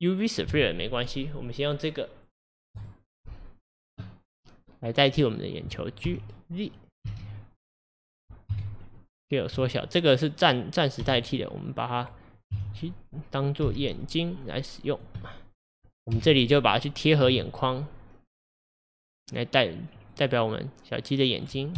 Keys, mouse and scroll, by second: 4.9 click, 5.2 click, 6.1 g, 8.5 KP_1, 9.6 s, 11.0 g, 12.5 KP_7, 13.7 g, 15.2-16.2 middle drag, 16.2 KP_1, 17.3 g, 20.6-21.5 middle drag, 21.5 scroll up 1.